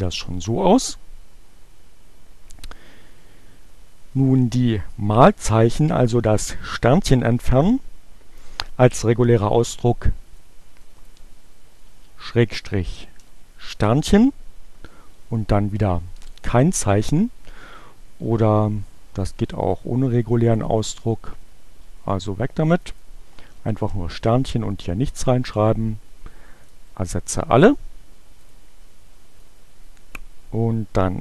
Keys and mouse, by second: 10.9 click, 15.4 click, 15.9 BackSpace, 20.3 click, 22.9 click, 24.7 click, 25.3 click, 26.7 click, 28.5 click, 29.4-30.8 drag.